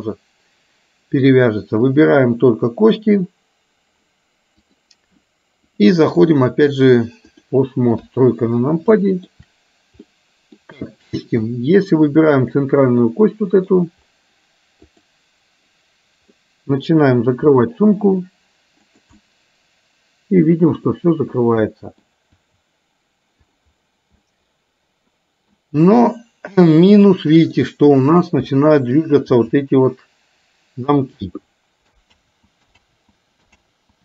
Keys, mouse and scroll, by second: 4.7 click, 5.7 click, 6.2-7.5 drag, 9.0 shift+middle click, 9.0 shift+KP_3, 10.1 middle click, 11.5-12.0 middle drag, 13.2-13.7 middle drag, 14.9 click, 16.4 middle click, 18.1 r, 19.2-20.9 middle drag, 21.7-22.1 middle drag, 22.5 r, 24.2-25.7 middle drag, 27.1 middle click, 28.6 middle click, 29.5 r, 32.6 ctrl+z, 32.9 ctrl+z.